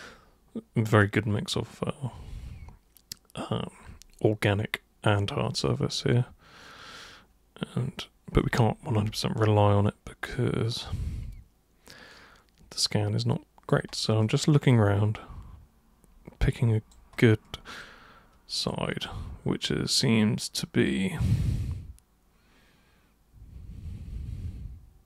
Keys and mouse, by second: 9.2-13.7 alt+super+drag, 14.2-16.9 drag, 17.8 alt+click, 19.0-25.0 alt+drag.